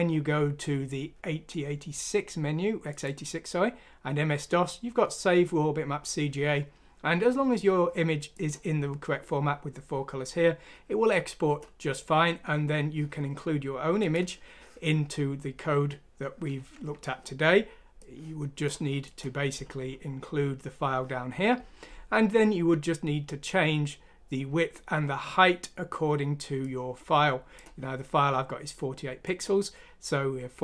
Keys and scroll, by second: 16.7 Escape.